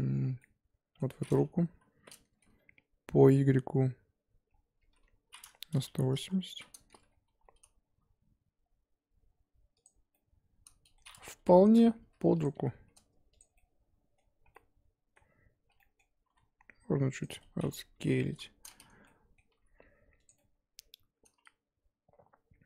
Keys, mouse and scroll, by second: 1.6 KP_7, 4.5 scroll down 1, 4.8 r, 6.7-7.2 scroll up 1, 7.2 g, 10.1-11.4 middle drag, 11.4 KP_1, 11.6 scroll up 2, 12.0 r, 12.5 g, 13.6-15.7 middle drag, 15.7 scroll down 1, 15.8 middle click, 16.2 s, 17.3 middle click, 18.2 KP_1, 19.0 middle click, 19.5 g, 20.4-22.6 middle drag.